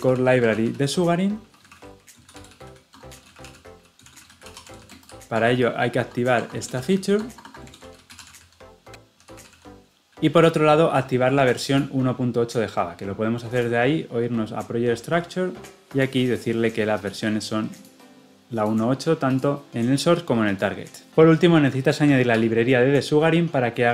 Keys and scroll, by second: 21.1 ctrl+x, 22.2 ctrl+v.